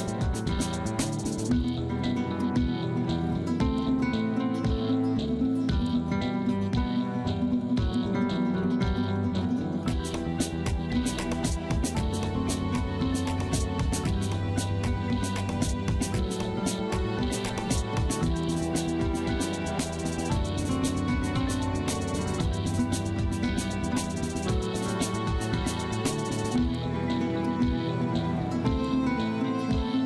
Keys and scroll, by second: 0.3 Delete, 4.6 F3, 4.8 F2, 10.2 ctrl+z, 10.6 space, 27.4 space.